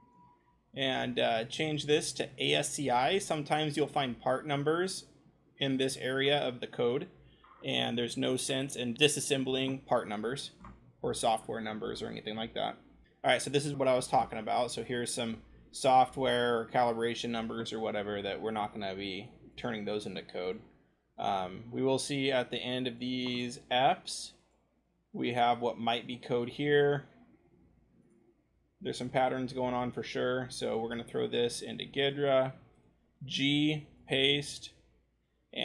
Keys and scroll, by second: 13.0-15.2 ctrl+scroll, 15.2-18.4 scroll, 20.7-26.7 scroll, 31.6 ctrl+shift+c, 33.1 ctrl+g.